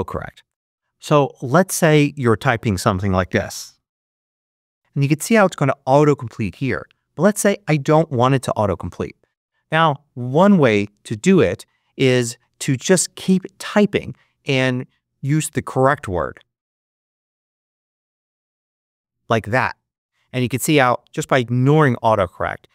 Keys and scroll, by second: 3.3-5.5 typing, 17.1-18.5 typing.